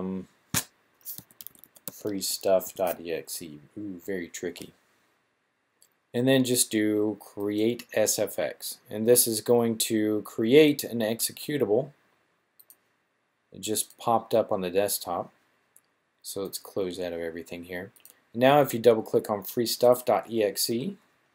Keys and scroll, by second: 1.2-2.6 typing.